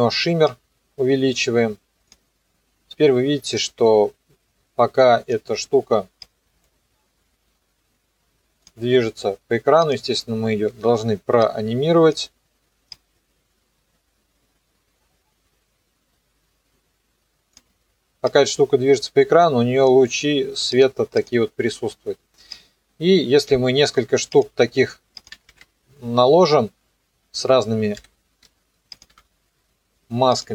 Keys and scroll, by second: 10.6 u, 25.5 ctrl+d, 28.0 m, 29.1 Delete.